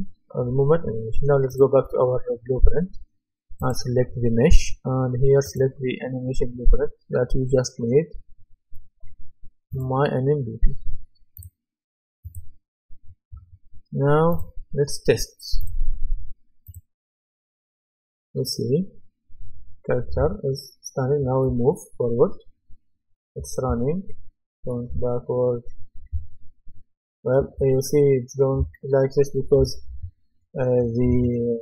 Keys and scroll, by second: 21.5 w, 23.7 s, 24.9 d, 26.1 a, 27.6 d, 29.6 d, 31.1 Escape.